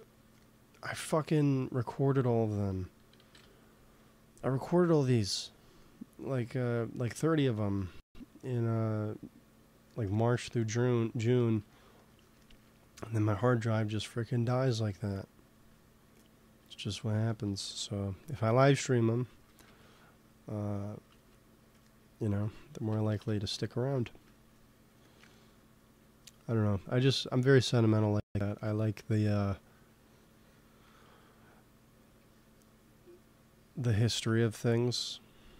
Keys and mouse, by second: 3.2 KP_3, 4.6 ctrl+s, 14.6 g, 14.8 f, 15.6-17.5 drag, 17.3 middle click, 17.6 f, 18.0 f, 18.5 click, 19.3 ctrl+z, 19.5 f, 21.1 ctrl+z, 21.7 click, 23.1 KP_3, 24.8 f, 25.5-29.3 drag, 27.1 f, 28.6 ctrl+z, 29.0 f, 29.6-31.3 drag, 30.7 f, 34.1 ctrl+z, 34.3 f.